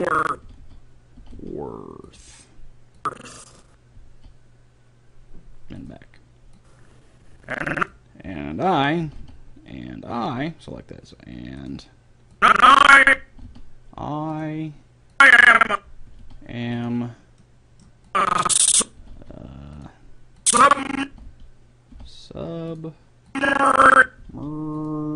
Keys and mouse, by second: 0.4 r, 0.6 r, 0.9 click, 1.2 r, 3.0-4.7 drag, 4.0 r, 6.6-8.4 drag, 9.0 r, 12.4-14.2 drag, 13.4 r, 15.2-16.8 drag, 16.1 r, 18.1-19.8 drag, 19.0 r, 21.1 r, 21.3 r, 24.2 r, 24.6 click.